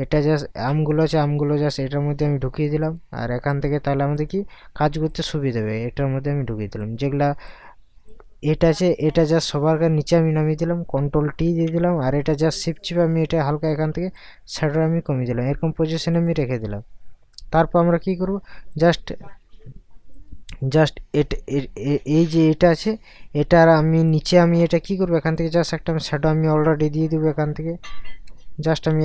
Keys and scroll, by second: 11.4 ctrl+t, 28.3 Caps_Lock.